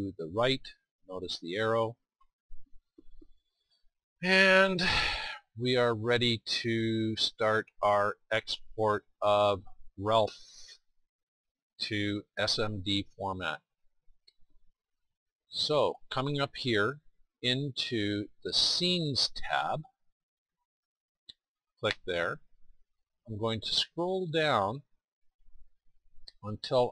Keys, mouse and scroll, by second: 6.5-13.9 middle drag, 20.7-26.9 drag.